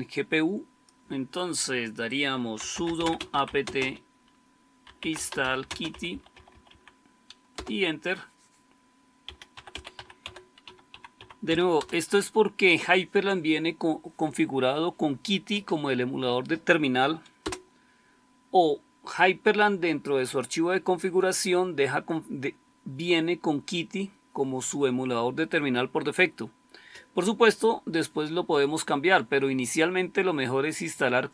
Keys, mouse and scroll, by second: 2.3-7.1 typing, 7.5 Return, 9.1-11.8 typing, 17.2 Return.